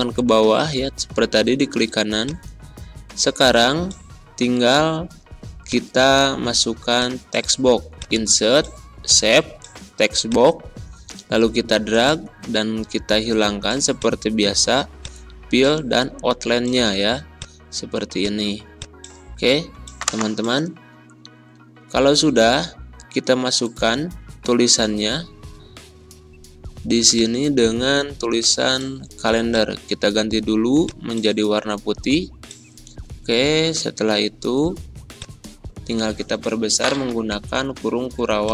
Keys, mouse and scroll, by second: 0.4 ctrl+scroll down 1, 2.2 click, 5.6-12.8 drag.